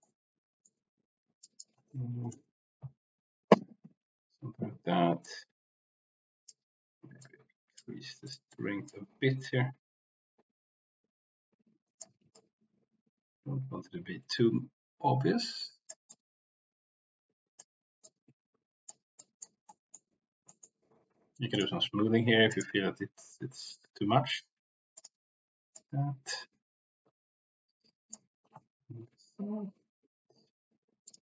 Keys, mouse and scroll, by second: 0.0 middle click, 1.4 click, 5.2-6.5 drag, 7.1-8.4 drag, 8.5 click, 9.3-12.0 drag, 12.1 ctrl+z, 12.3-15.9 drag, 15.1 c, 16.1-17.6 drag, 17.9 click, 19.1 click, 19.7 middle click, 20.4 middle click, 21.5 click, 22.4 click, 25.0 click, 25.7-28.1 drag, 31.0 click.